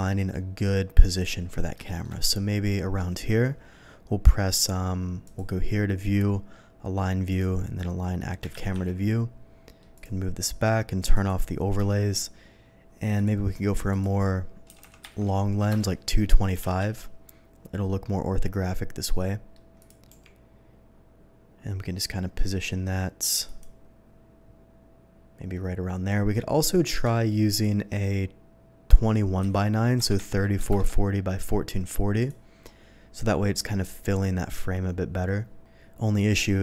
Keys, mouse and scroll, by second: 1.1 click, 1.8 shift+middle click, 5.2 click, 7.2 click, 8.6 z, 8.8 middle click, 9.9 click, 11.1 click, 13.1 click, 13.8 click, 14.3 g, 14.7 KP_2, 15.1 KP_5, 15.6 Return, 16.5 g, 16.6 z, 16.9-19.5 middle drag, 19.7 click, 20.1 g, 23.4 click, 26.9 click, 27.4 click, 29.4 KP_3, 30.0 KP_4, 30.2 KP_4, 30.5 KP_0, 30.6 Return, 32.1 click.